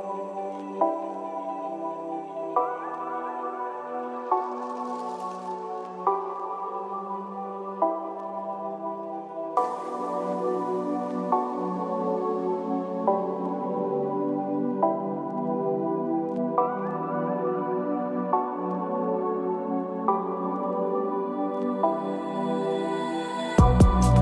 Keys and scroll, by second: 16.9 ctrl+-, 18.4 ctrl+=, 19.1 ctrl+-.